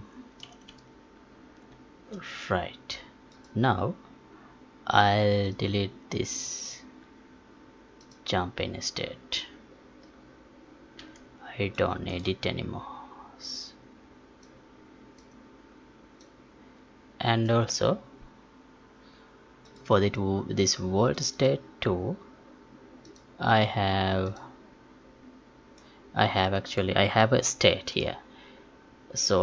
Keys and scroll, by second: 5.5 alt+Tab, 11.0 Delete.